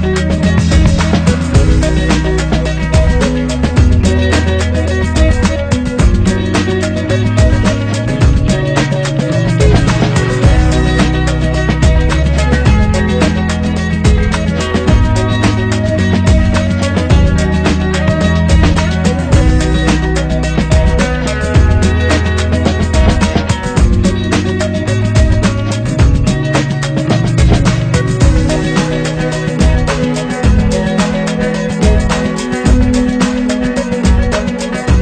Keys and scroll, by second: 0.9 ctrl+0, 2.5 ctrl+=, 10.3 ctrl+=, 12.9 Up, 22.4 ctrl+[, 29.6 ctrl+z, 33.0 Up.